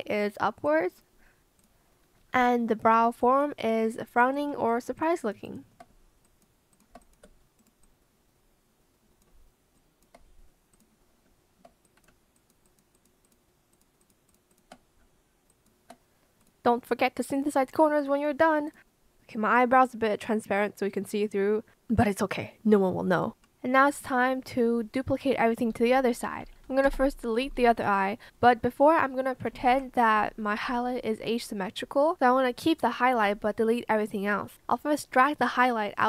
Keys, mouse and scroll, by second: 2.3 b, 2.4 click, 3.0 ctrl+shift+z, 3.1 shift+click, 3.5 shift+click, 4.0 shift+click, 4.9 shift+click, 6.2 shift+click, 6.7 shift+click, 9.7 shift+click, 12.3 shift+click, 12.6 shift+click, 12.9 shift+click, 13.2 shift+click, 14.2 shift+click, 14.4 shift+click, 26.8 BackSpace, 27.3 Return, 29.5 ctrl+z.